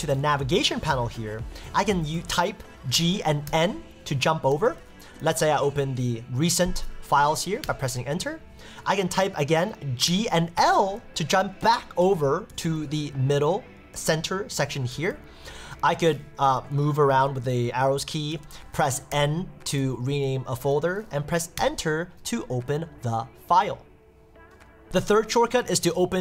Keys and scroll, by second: 4.5 Up, 7.6 Return, 11.6 Down, 12.5 Up, 13.3 Down, 14.9 Up, 15.1 Down, 16.5 Up, 17.1 Down, 18.3 Up, 20.2 Escape, 21.6 Return.